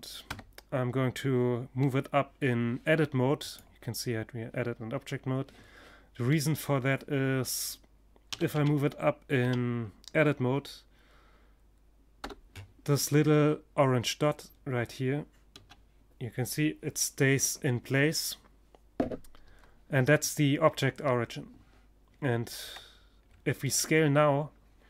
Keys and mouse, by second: 4.7-6.7 middle drag, 6.7 g, 14.0 g, 21.0 Tab, 21.7-24.3 middle drag, 24.1 s.